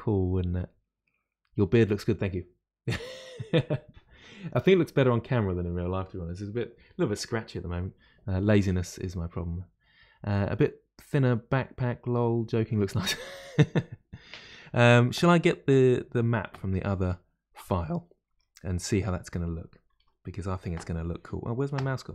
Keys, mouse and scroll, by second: 18.3 Tab, 20.0 KP_Divide.